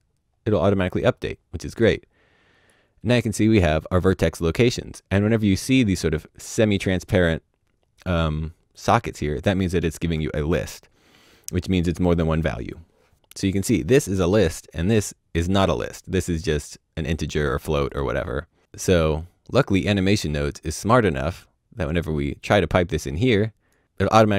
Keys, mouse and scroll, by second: 1.7 click, 5.4 click, 5.4-7.7 scroll up 1, 13.1-14.3 scroll down 1, 16.6-18.0 scroll down 1, 19.2 click, 21.7 click.